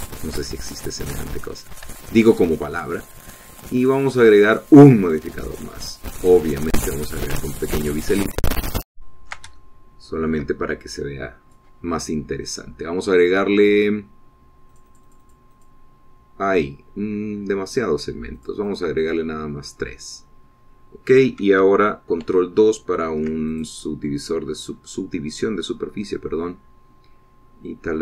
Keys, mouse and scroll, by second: 0.0-0.4 shift+scroll down 1, 0.4 middle click, 1.1 shift+click, 1.8 shift+scroll up 3, 2.1 middle click, 2.5 Tab, 3.2 Tab, 5.0 click, 5.7 click, 8.0 click, 9.5-10.7 ctrl+drag, 10.8 ctrl+shift+click, 12.1 click, 16.0-17.1 drag, 19.6 click, 20.3 click, 23.5 ctrl+2, 24.8 ctrl+click, 25.3-26.0 ctrl+scroll down 2, 26.4 scroll down 1, 27.9-28.0 scroll down 2.